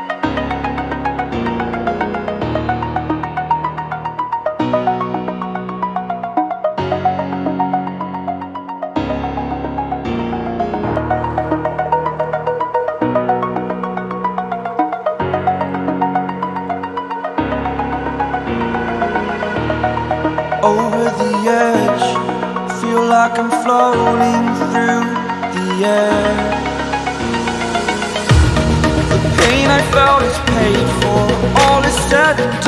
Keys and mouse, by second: 0.1 click, 0.5 right click, 1.1 click, 2.4 click, 4.5 ctrl+t, 5.4 click, 6.8 click, 8.4 click, 10.6 click, 13.4 Return, 15.1 click, 18.8 right click, 19.3 click, 20.4 click, 23.9-24.9 drag, 28.6 click, 29.3 click, 31.4 click.